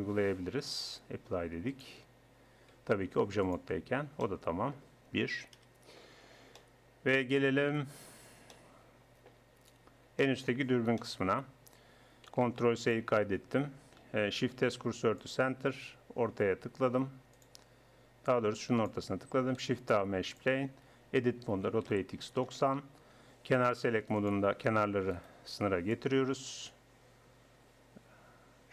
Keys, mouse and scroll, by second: 0.1 Tab, 1.7-3.3 drag, 2.7 Tab, 5.6 KP_1, 6.6 middle click, 8.9 click, 10.6 middle click, 11.0 middle click, 12.4 ctrl+s, 14.5 shift+s, 17.4-20.4 drag, 19.6 shift+a, 20.7 Tab, 21.6 r, 24.2 click, 25.0 click, 25.2-27.5 middle drag, 27.5 click.